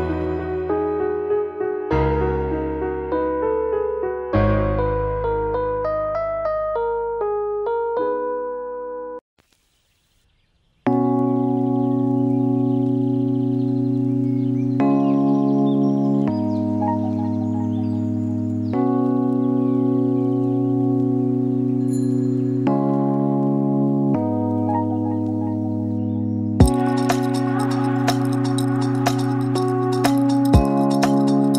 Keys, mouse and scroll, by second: 2.1 click, 2.8 click, 3.9 middle click, 4.2 ctrl+middle click, 4.8 middle click, 6.2 click, 8.2 click, 11.7 middle click, 13.2 scroll down 3, 13.6 shift+middle click, 13.8 middle click, 14.8 click, 15.4 shift+click, 18.4 ctrl+l, 20.0 click, 20.3 middle click, 21.1 ctrl+middle click, 21.7 shift+middle click, 21.9 middle click, 22.3 shift+middle click, 22.6 middle click, 23.5 shift+middle click, 24.1 shift+middle click, 24.4 middle click, 27.7 click, 28.0 click, 28.4 ctrl+middle click, 28.9 shift+middle click, 30.8 Page_Down.